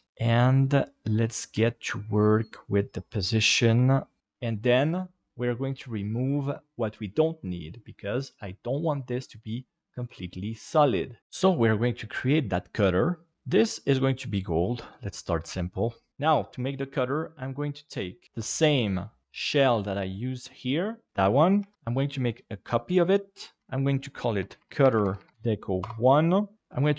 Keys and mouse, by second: 0.1 r, 1.6 g, 3.7 s, 4.2 middle click, 17.8 click, 18.2 click, 19.2 KP_Divide, 21.7 shift+d, 23.6 F2, 25.0 shift+t.